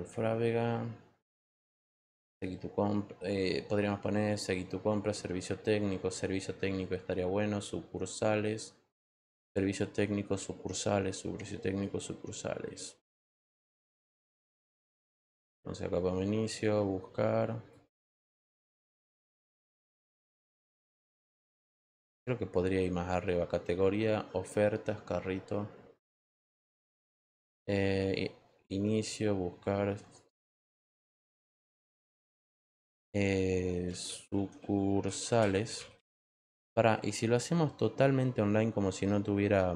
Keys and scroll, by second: 33.6-36.4 typing.